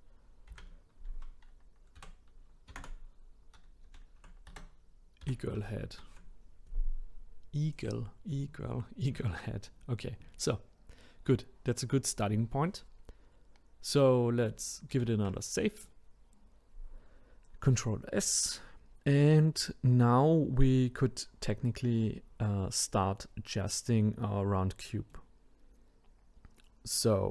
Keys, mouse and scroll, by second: 14.9 ctrl+s, 25.1-27.3 middle drag.